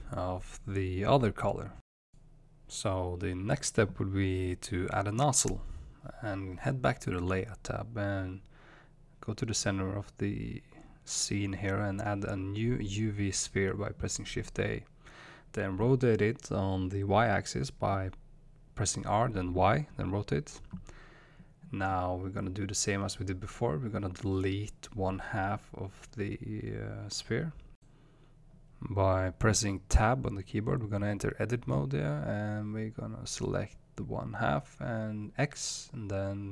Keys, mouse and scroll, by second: 0.6 click, 3.6-5.7 middle drag, 5.7 click, 6.5 middle click, 7.4 space, 8.0-14.7 shift+middle drag, 8.8-9.5 scroll up 2, 9.5-13.0 scroll down 2, 13.0 shift+a, 14.1-14.7 scroll up 2, 14.7 right click, 15.8 r, 19.8 ctrl+click, 21.7-22.4 middle drag, 21.7 KP_1, 22.2 scroll up 2, 23.2-25.5 shift+middle drag, 24.3-25.5 scroll up 2, 25.7 click, 26.2 click, 27.2-27.7 scroll down 1, 27.7 click, 30.6 Tab, 34.0 click.